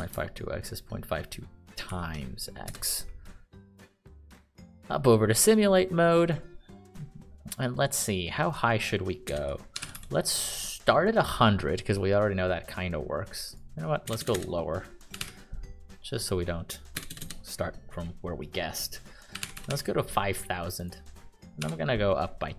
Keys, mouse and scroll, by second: 0.3 Left, 2.2 *, 3.0 Return, 9.6-10.8 typing, 14.4-16.1 typing, 17.3 BackSpace, 17.5 BackSpace, 19.5-20.3 typing, 21.7-22.5 typing.